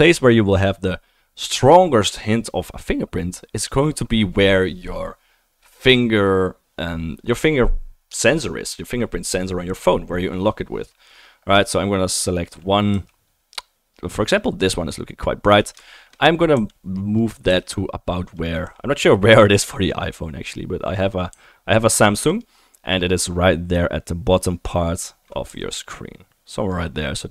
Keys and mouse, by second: 12.9 g, 14.1-21.6 drag, 16.5 r, 17.5 g, 18.7 r, 21.3 r, 21.6-25.3 right drag, 25.3 click, 25.5 g, 26.2 right click, 26.6-27.3 drag.